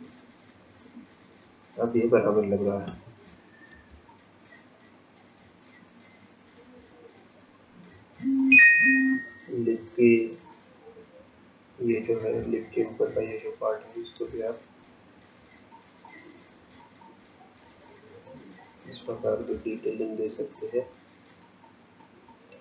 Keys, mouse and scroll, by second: 0.1-1.7 scroll down 8, 1.7 scroll down 3, 4.1 shift+click, 8.7-9.3 scroll down 8, 9.7 scroll down 1, 11.3 scroll up 2, 12.1-12.5 scroll up 1, 12.5 shift+middle click, 14.5 ctrl+click, 16.1 ctrl+click, 17.1 ctrl+click, 18.6 ctrl+click, 20.9 ctrl+click.